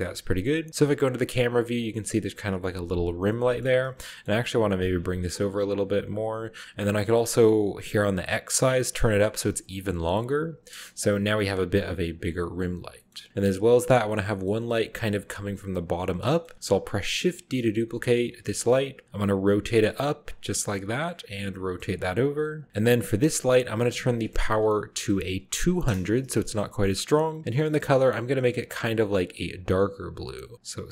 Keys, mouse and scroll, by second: 0.0 middle click, 0.7 KP_0, 1.3 middle click, 1.3-2.0 scroll down 1, 1.6 r, 1.8-2.8 middle drag, 2.0-3.1 scroll up 1, 3.1 middle click, 3.1-5.8 scroll down 3, 3.3-3.6 middle drag, 4.0 middle drag, 4.6 middle click, 4.8 g, 6.2 click, 8.3 click, 9.0 middle click, 10.0 click, 10.7 KP_0, 11.3-12.2 scroll up 1, 12.0 g, 12.2 middle click, 13.0 middle click, 13.6 click, 13.9-15.7 scroll down 1, 14.1 middle click, 16.3-17.5 middle drag, 16.5-17.5 scroll down 1, 18.2 d, 18.9 click, 19.2 r, 20.2-21.2 middle drag, 20.8-22.3 typing, 22.5 drag, 22.7-23.8 middle drag, 24.1 click, 24.9-25.5 typing, 25.8 Return, 26.7 middle click, 27.6 click, 28.3 click, 28.9-30.7 drag.